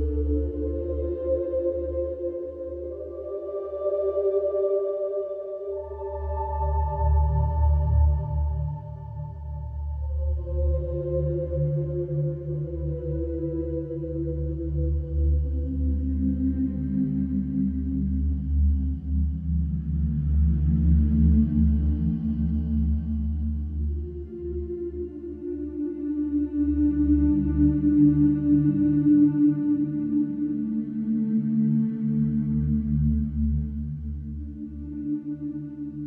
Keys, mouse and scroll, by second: 1.6-2.6 drag, 4.4 shift+click, 5.2 click, 6.5 1, 7.7 0, 9.7 Return, 11.4 Escape, 13.4-14.6 drag, 15.3-16.9 middle drag, 17.3-18.4 drag, 20.2-21.3 drag, 22.4 click, 23.4 click, 24.4-25.5 drag, 27.8-28.8 drag, 29.1-30.1 drag, 31.6-32.7 drag, 32.7-33.8 right drag, 34.7 click.